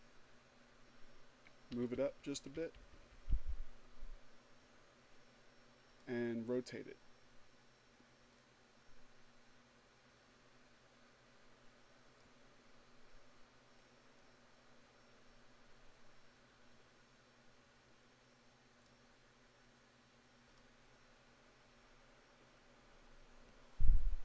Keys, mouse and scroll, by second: 0.0 Up, 4.3 click, 6.6-10.8 drag, 12.1-17.4 drag, 18.8 click, 23.3 click.